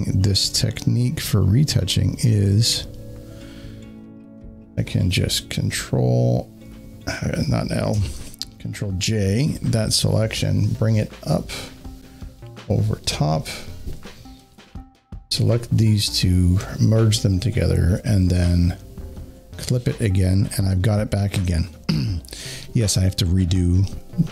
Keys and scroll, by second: 6.4 ctrl+l, 7.8 Escape, 9.3 ctrl+j, 11.4 j, 17.9 ctrl+e.